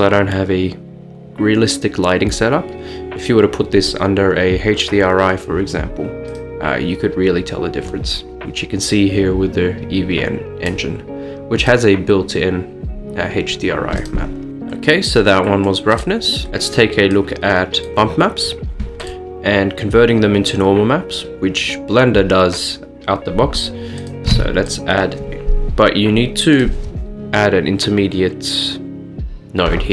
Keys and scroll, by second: 24.4 a.